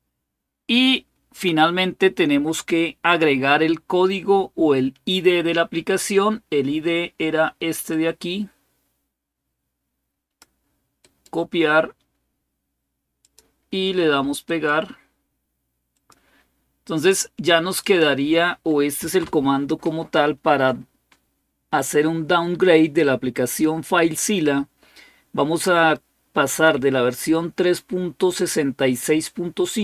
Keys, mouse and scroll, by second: 7.7-10.2 drag, 10.8 right click, 11.1 right click, 13.0 click, 14.3 right click, 14.7 right click, 15.7 click, 17.6 click, 18.8 Right.